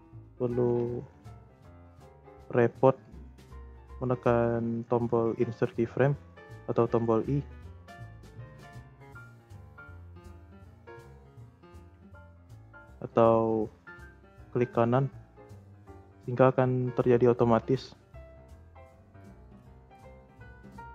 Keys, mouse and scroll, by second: 7.5 click, 8.1 click, 9.4 i, 10.4 i, 10.9 click, 11.4 click, 11.7 i, 12.9-15.9 right drag, 16.1-19.3 drag.